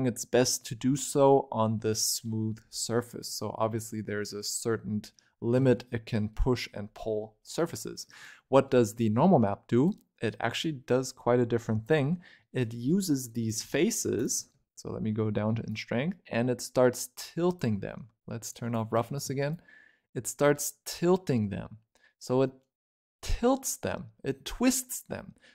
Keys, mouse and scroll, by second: 0.6 scroll down 4, 0.8-2.5 middle drag, 2.5 scroll down 6, 2.7 middle click, 3.2-3.6 scroll up 8, 3.6-5.2 middle drag, 5.2 scroll down 5, 5.5 shift+middle click, 5.7 scroll up 6, 6.0-7.3 middle drag, 7.3 scroll down 2, 7.6-8.5 scroll up 10, 8.5-9.7 middle drag, 9.7 click, 12.3 middle click, 12.8-13.4 scroll up 3, 13.4 click, 14.7-15.6 scroll up 1, 15.6-22.4 shift+drag.